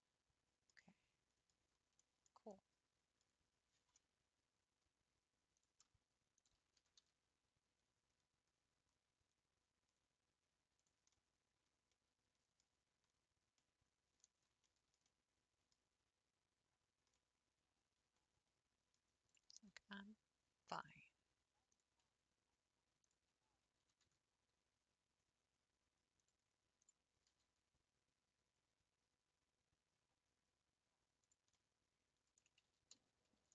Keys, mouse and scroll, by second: 0.1-5.6 middle drag, 5.6 click, 6.3 shift+click, 6.9 g, 11.1-12.7 middle drag, 12.7-13.2 scroll down 5, 13.3 scroll up 2, 13.6 middle click, 14.2-14.6 scroll up 4, 14.7-19.3 shift+middle drag, 19.3 click, 19.8 g, 21.7 click, 23.0 ctrl+click, 23.8 g, 26.8 click, 27.3 g, 31.7 middle click, 32.6 ctrl+z, 33.1 ctrl+z, 33.4 ctrl+z.